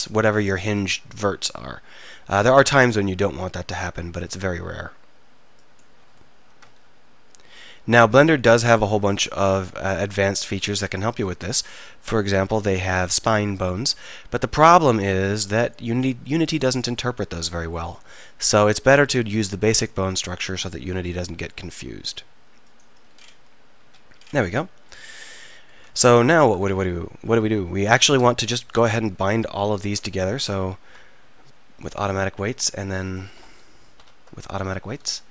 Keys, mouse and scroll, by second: 0.6 e, 3.9 e, 6.2-10.0 drag, 6.8 e, 11.2 click, 11.4 e, 13.2 e, 20.6 e, 23.8 z, 26.7 Tab, 27.9-29.6 right drag, 30.5 ctrl+p, 34.0 ctrl+p.